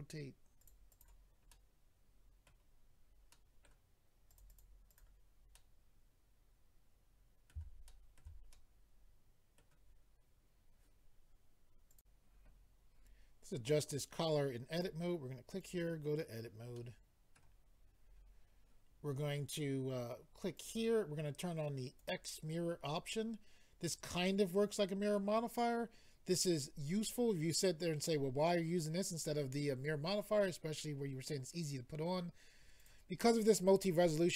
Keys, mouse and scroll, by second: 0.6 click, 0.7 click, 0.9 click, 1.0 double click, 1.5 middle click, 3.3 middle click, 4.3 click, 4.4 click, 4.5 click, 4.6 double click, 4.9 double click, 5.0 double click, 5.5 middle click, 7.8 shift+middle click, 8.2 middle click, 8.5 middle click, 11.9 click, 13.1 click, 14.7 click, 14.8 click, 15.6 click, 15.7 click, 16.7 middle click, 17.6-18.6 scroll up 6, 20.5 click, 20.6 click, 22.0 click, 22.1 click, 32.8 click, 32.9 click.